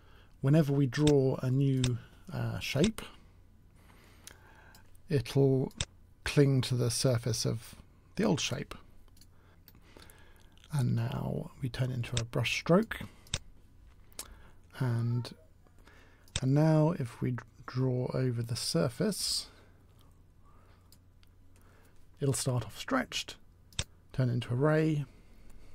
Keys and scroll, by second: 9.4 s, 9.4 w.